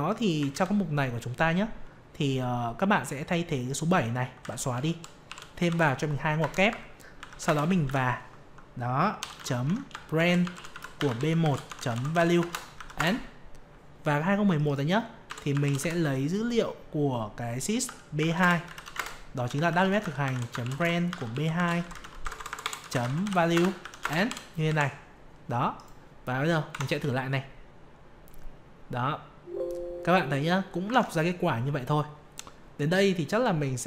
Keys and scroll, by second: 0.5 ctrl+c, 7.8 ctrl+v, 18.9 ctrl+space, 26.7 F5, 30.9 alt+Tab.